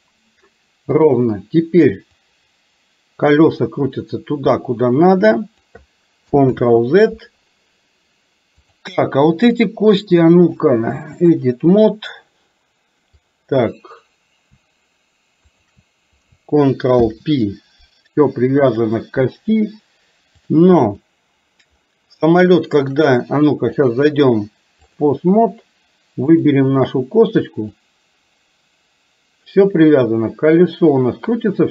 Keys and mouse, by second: 1.0 click, 2.3-5.8 drag, 6.6 ctrl+z, 10.5 click, 13.3 click, 15.6 shift+click, 17.1 ctrl+p, 18.7 click, 20.6 click, 22.5 shift+middle click, 24.0 click, 26.4 click, 27.9-31.7 drag.